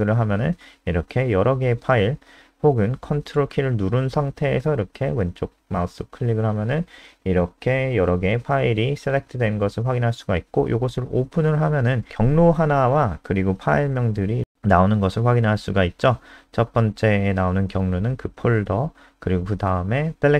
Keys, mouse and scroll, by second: 0.3 click, 5.7 ctrl+click, 10.0 click.